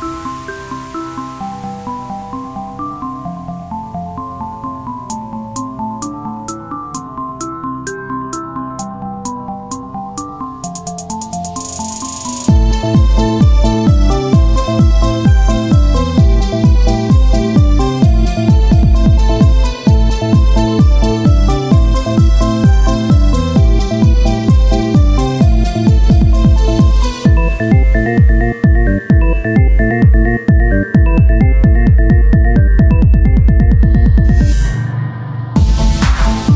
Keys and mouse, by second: 5.7 KP_7, 7.5 e, 8.8 r, 9.8-10.9 drag, 11.9 click, 11.9 r, 12.8 z, 13.2 c, 14.4-15.5 drag, 15.1 z, 15.3 z, 15.6 c, 17.3 e, 18.6 r, 20.6 click, 20.6 s, 22.5 click, 22.5 z, 29.7-34.6 ctrl+z, 34.6 s.